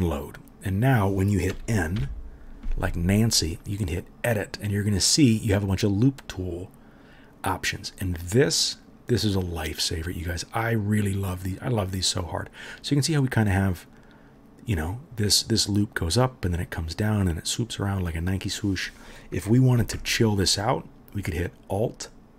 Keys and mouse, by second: 2.0 n, 14.9-18.1 drag, 14.9-18.1 middle drag, 18.7 click, 18.7 middle click, 20.0 alt+middle click, 20.1-21.4 alt+right drag, 21.4-22.3 alt+middle drag.